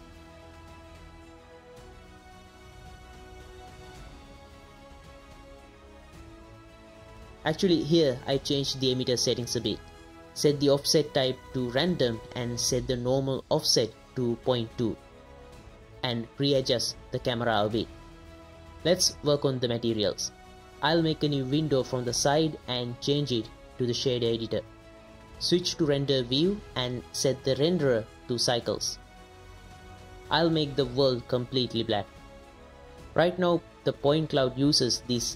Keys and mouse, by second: 0.1 click, 1.4 click, 7.3 space, 7.8 click, 7.8 space, 8.3-8.8 drag, 9.0 click, 9.6 KP_0, 9.9 middle click, 10.9 middle click, 11.3 middle click, 12.1 click, 12.6-13.7 middle drag, 14.2 click, 15.0 middle click, 15.7 click, 15.9 KP_0, 16.2-16.8 shift+middle drag, 16.9 ctrl+middle click, 17.1 shift+middle click, 17.3 middle click, 18.2-18.7 drag, 18.7 space, 21.0 click, 23.1-23.9 drag, 25.0 n, 25.6 click, 26.2 click, 26.5 shift+click, 27.6 z, 28.7 click, 29.0-29.4 drag, 30.0 click, 31.1 drag, 33.2 right click, 34.1 right click.